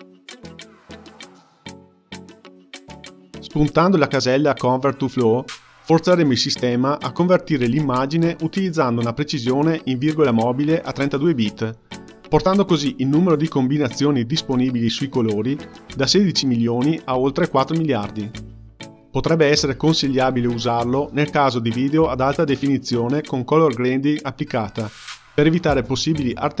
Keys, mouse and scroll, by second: 3.4-25.4 drag, 25.4-26.6 scroll down 3.